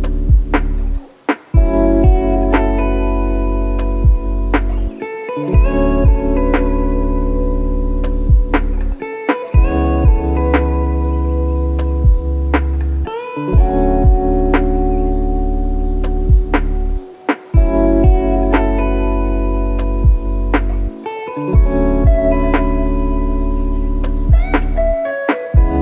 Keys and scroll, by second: 3.6 KP_Subtract, 3.7 KP_6, 4.1 Return, 5.9 KP_Subtract, 6.0 KP_9, 6.3 Return, 8.6 KP_Subtract, 8.8 KP_7, 9.3 Return.